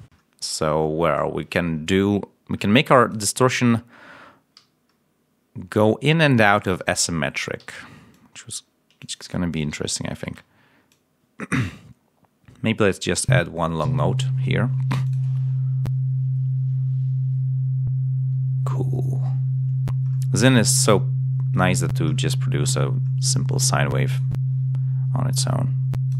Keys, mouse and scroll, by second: 4.8 scroll up 1, 5.2-5.8 scroll down 2, 7.5 d, 8.0 click, 8.9 click, 9.1 space, 9.8 ctrl+scroll up 2, 10.1 space, 10.8-13.3 drag, 13.7 l, 15.0 click, 20.4 right click, 22.0-22.9 scroll down 1, 24.0 click, 25.3 click.